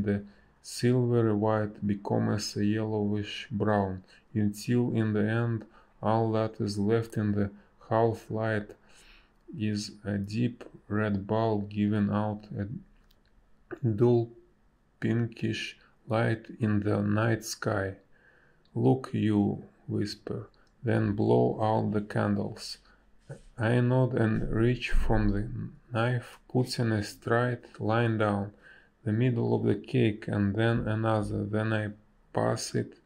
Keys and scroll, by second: 3.0 space, 9.2 space, 17.3 a, 22.7 space, 23.4 b, 23.8 space, 28.2 space, 29.2 space.